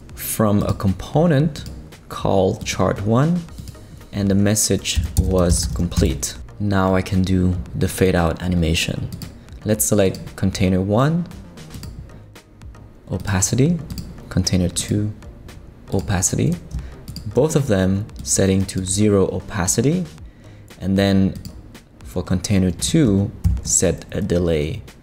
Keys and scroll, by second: 4.7-6.2 typing, 23.4 shift+Right.